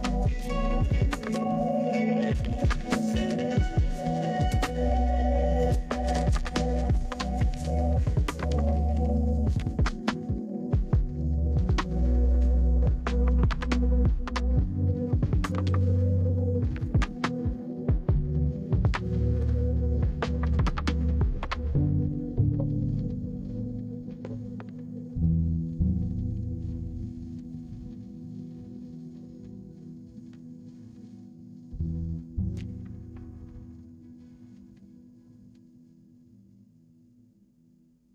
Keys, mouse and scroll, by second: 0.6 click, 1.1 right click, 5.7 click, 6.3 click, 7.4 click, 8.0 right click, 11.6 click, 12.2 right click, 12.9 middle click, 13.5-14.2 scroll down 2, 14.2 middle click, 16.8 click, 19.4 click, 20.8-21.2 scroll down 2, 25.1 middle click, 32.0 right click, 32.2 right click, 33.7 middle click, 37.8 click.